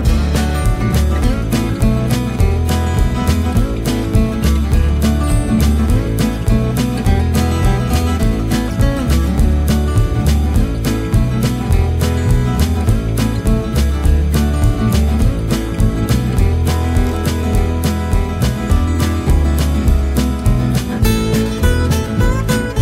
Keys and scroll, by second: 16.5 Return, 18.1 Return.